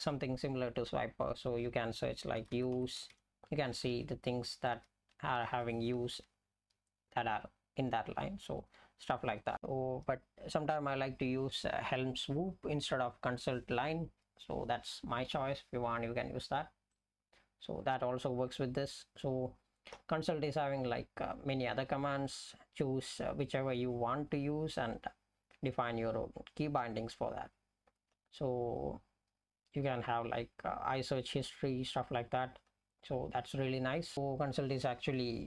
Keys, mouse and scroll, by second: 2.1-3.3 typing, 3.8 Down, 4.0 Down, 4.6 Up, 4.8 Up, 6.0 Down, 6.2 Down, 9.1 BackSpace, 9.3 BackSpace, 9.5 BackSpace, 9.5 ctrl+g.